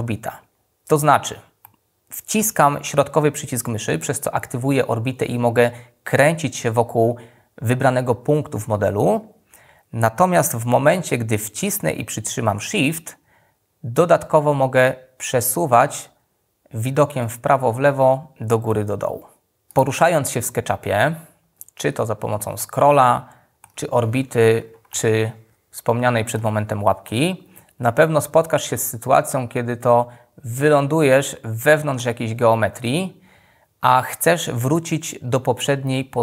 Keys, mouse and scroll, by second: 11.3-15.0 shift+middle drag.